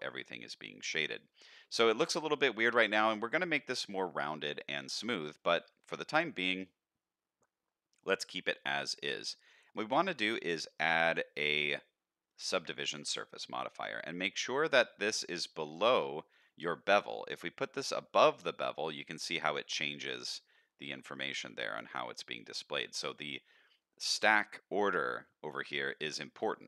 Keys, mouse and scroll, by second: 0.0 middle drag, 0.9 middle click, 1.7 middle click, 2.8 middle click, 3.6-4.0 middle drag, 5.3 middle click, 5.8 middle drag, 8.6 middle click, 9.7 drag, 10.0-13.0 drag, 16.3 click, 16.9 click, 17.6 click, 20.3-21.7 drag, 25.9 click, 26.5 click.